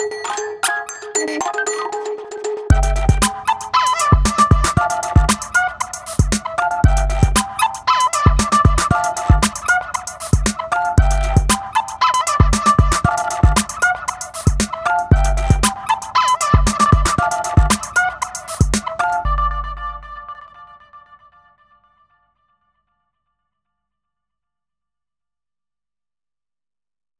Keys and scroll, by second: 0.0 super+a, 0.6 shift+super+v, 2.7 shift+super+a.